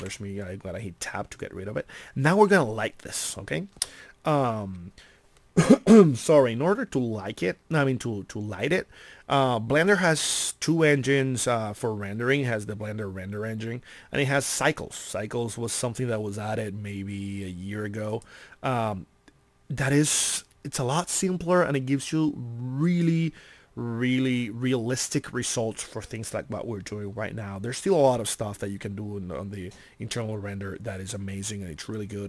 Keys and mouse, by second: 0.0 t, 18.1-20.9 middle drag.